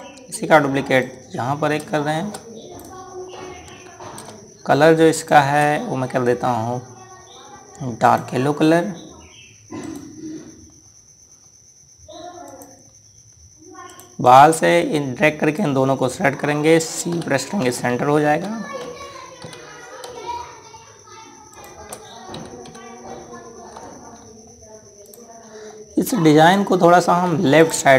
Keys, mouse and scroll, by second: 5.9 click, 8.8 click, 10.6 right click, 11.4-13.2 scroll down 1, 13.2 click, 13.6 scroll down 1, 14.7 click, 17.9 c, 18.9 ctrl+g, 20.2 ctrl+Down, 22.3 click, 23.1 Down, 24.9 scroll down 1, 25.8 click, 26.2 scroll down 1, 27.2 click.